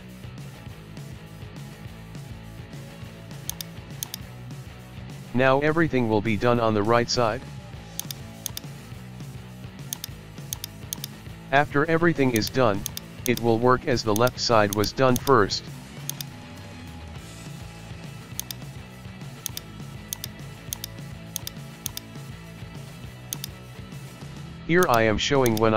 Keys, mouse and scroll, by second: 1.3 KP_1, 1.5-2.7 scroll down 1, 2.7 shift+middle click, 3.5 right click, 4.0-5.5 drag, 8.0 right click, 8.5-10.0 drag, 10.6 right click, 10.9-12.4 drag, 12.9 right click, 13.3 click, 14.8 right click, 15.2-16.2 drag, 18.4 right click, 19.5 click, 20.2 Right, 20.7 click, 21.4 Right, 21.9-23.4 drag, 24.8-25.7 drag.